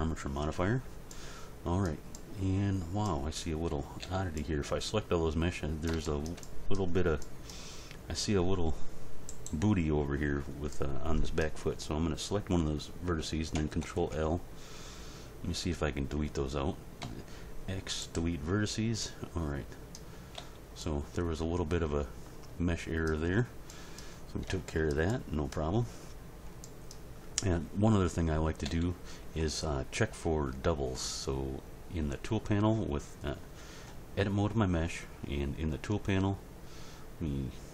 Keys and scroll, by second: 3.6 a, 13.8 ctrl+l, 17.0 x, 20.4 z, 23.2 z, 28.6 a.